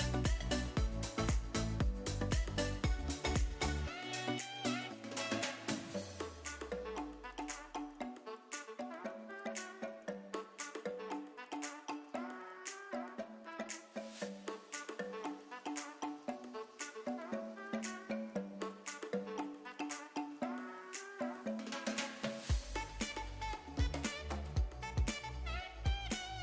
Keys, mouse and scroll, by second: 2.3-3.2 drag, 3.5-4.3 drag, 4.6-5.0 drag, 7.3 click, 10.3 click, 12.4-16.1 drag, 19.8 click, 22.8 click, 25.6-26.4 drag.